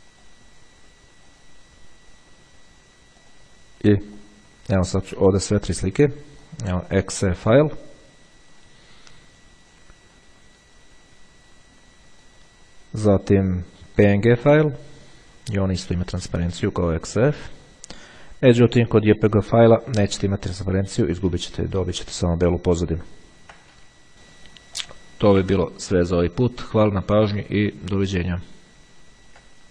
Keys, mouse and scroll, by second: 0.4 click, 1.6 click, 3.4 click, 4.4 click, 6.7-7.8 drag, 10.2 click, 13.9 click, 17.4-18.5 drag, 19.0 click, 22.0-22.6 ctrl+scroll up 2, 22.9-24.0 ctrl+scroll down 2, 25.0 click.